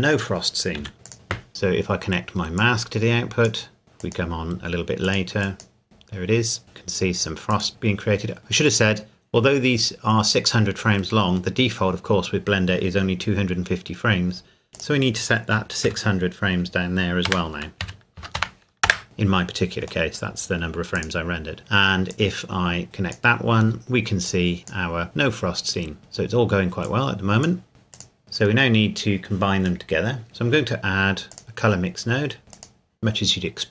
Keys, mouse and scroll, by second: 0.8 a, 1.0 click, 1.5-2.6 scroll down 1, 2.6 click, 3.8 scroll down 1, 4.0 click, 7.5 click, 14.8 click, 15.9 KP_6, 17.8 KP_6, 18.2 KP_0, 18.9 KP_Enter, 19.0 scroll down 1, 20.1 middle click, 21.0 click, 22.1 click, 23.8-24.3 scroll up 1, 24.3 click, 25.0 scroll up 1, 26.0 scroll down 1, 26.8 click, 27.7 middle click, 27.9 click, 28.2-28.7 scroll up 1, 29.8 middle click, 30.1 middle click, 31.3 click, 32.5 click.